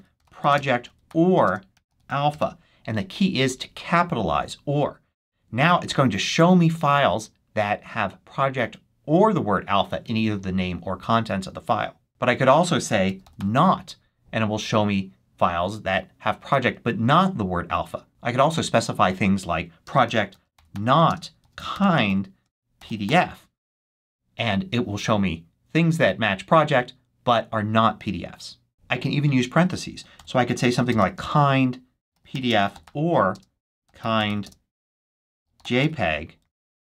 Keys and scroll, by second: 0.0-2.8 typing, 12.7-13.8 typing, 19.8-23.4 typing, 29.8-36.3 typing.